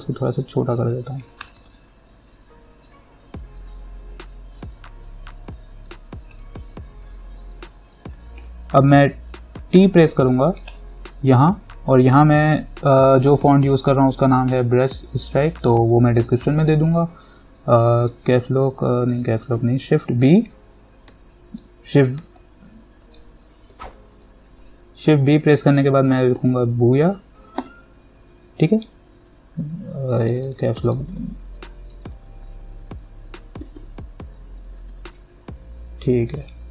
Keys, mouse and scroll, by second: 4.5 click, 5.9 ctrl+z, 6.5-10.0 drag, 10.0 t, 10.9 click, 18.3 Caps_Lock, 20.3 shift+b, 22.6 shift+v, 26.4-28.3 typing, 32.1 Caps_Lock, 32.6 shift+b, 33.8-35.6 typing.